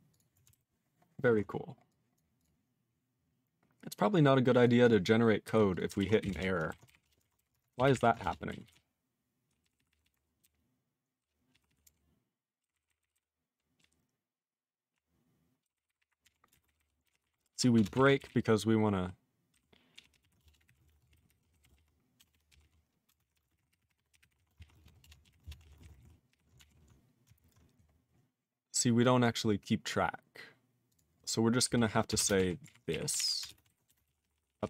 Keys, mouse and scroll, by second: 5.4 q, 5.7 click, 5.7 click, 6.3 Return, 7.0 Return, 8.2 ctrl+Return, 8.7 ctrl+s, 8.7-9.4 ctrl+p, 9.6 ctrl+p, 9.7 ctrl+p, 9.9 ctrl+p, 10.0 ctrl+p, 10.4-11.2 ctrl+n, 11.5 ctrl+p, 11.6 ctrl+p, 11.8 ctrl+f, 14.4-14.9 ctrl+p, 15.6 ctrl+n, 15.7 ctrl+n, 15.8 ctrl+n, 16.0 ctrl+p, 16.2 ctrl+f, 16.5 ctrl+space, 16.5 ctrl+n, 16.6 ctrl+n, 16.7 ctrl+n, 17.0 ctrl+g, 17.1 ctrl+p, 17.2 ctrl+e, 17.5 ctrl+b, 17.7 ctrl+space, 18.1 ctrl+g, 18.2-19.0 ctrl+n, 19.5 ctrl+n, 19.9 ctrl+p, 20.1 ctrl+p, 20.2 ctrl+e, 20.4-25.3 typing, 25.4 Return, 25.6 ctrl+a, 25.6 ctrl+p, 25.7 ctrl+space, 25.8 ctrl+n, 25.9 ctrl+g, 26.0 ctrl+e, 26.3 ctrl+p, 26.6 alt+f, 28.1-28.7 scroll up 2, 29.0 click, 29.2 click, 29.4-30.3 scroll up 3, 30.9 click, 30.9 click, 32.1 ctrl+space, 32.3 ctrl+alt+f, 32.6 ctrl+alt+f, 32.9 alt+w, 33.1 alt+b, 33.4 ctrl+space, 33.6 ctrl+alt+b, 33.8 BackSpace, 34.0 ctrl+a, 34.0 ctrl+p, 34.2 ctrl+p, 34.3-34.6 ctrl+p.